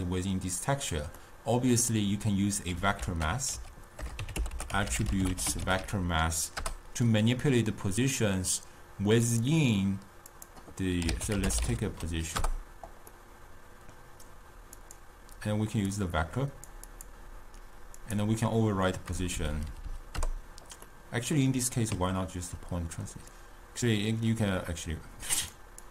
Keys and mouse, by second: 1.8-3.1 middle drag, 3.1 ctrl+a, 4.9 t, 10.4-13.6 drag, 13.6-15.2 middle drag, 15.2-19.7 drag, 19.7 Down, 19.9 Down, 21.2-23.6 middle drag, 23.6-25.9 drag.